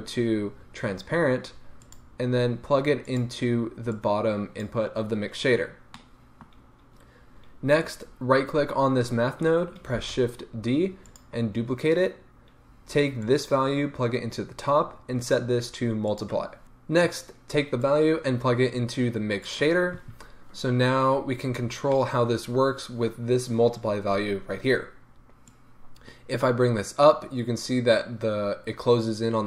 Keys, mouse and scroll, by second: 3.2 click, 3.9-5.9 drag, 5.9-7.9 middle drag, 7.9-8.5 right drag, 10.1 shift+d, 11.1 click, 13.2-21.9 drag, 21.3-21.9 scroll up 2, 21.9-25.4 middle drag, 25.4-29.4 drag.